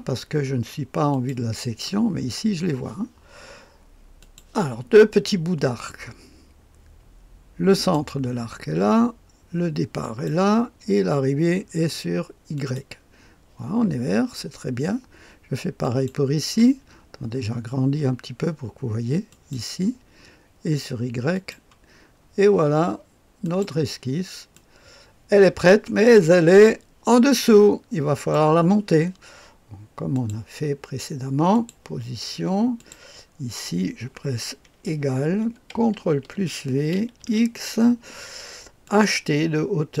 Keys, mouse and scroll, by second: 1.0 click, 4.1 click, 7.7 click, 10.0 click, 12.5 click, 15.8 click, 17.0-19.2 scroll up 1, 19.2 click, 21.3 click, 23.4 click, 24.5-25.7 drag, 26.5-28.3 drag, 30.1 click, 31.5 click, 32.7 click, 34.7 Menu, 34.9 =, 36.0 ctrl+v, 37.2 x, 38.8 click, 39.9 click.